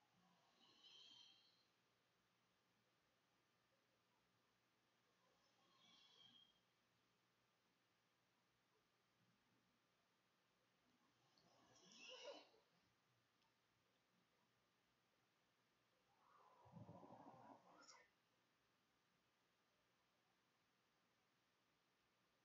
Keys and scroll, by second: 5.6 Escape, 5.7 `, 6.5 Tab, 7.9-9.8 typing, 10.6 Return, 13.7 \.